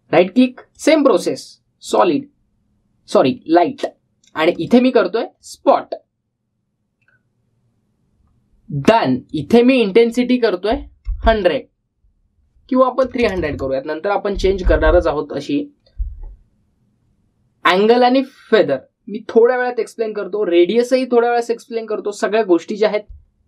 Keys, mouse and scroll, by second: 0.4 right click, 1.5 click, 5.3 click, 10.2 click.